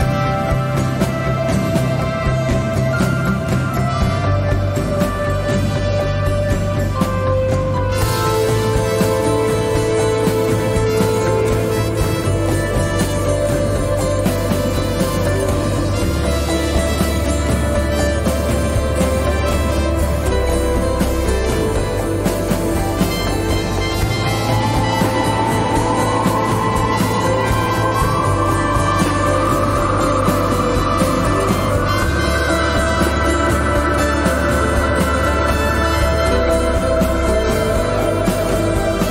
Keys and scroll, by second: 5.0 g, 5.6 z, 8.2 1, 9.4 Tab, 11.9 g, 12.4 z, 16.8 Tab, 19.7 q, 22.4 Tab, 25.0 m, 34.8 Tab, 36.9 Tab.